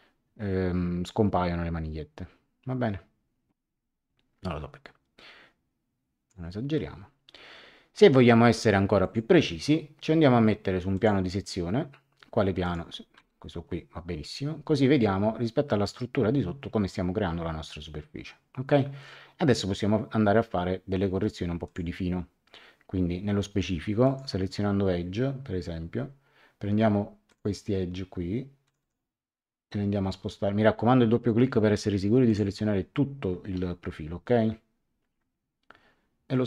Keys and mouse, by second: 9.0 click, 10.9 click, 12.6 click, 13.1 Return, 13.1 KP_Enter, 21.6 click, 24.0 click, 27.2 click, 28.6 click, 32.2 click.